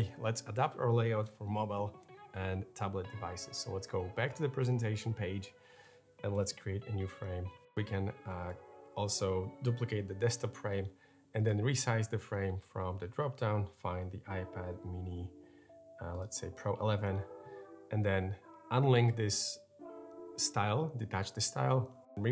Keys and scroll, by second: 6.1 BackSpace, 7.1 f, 7.5 BackSpace, 9.8 super+d.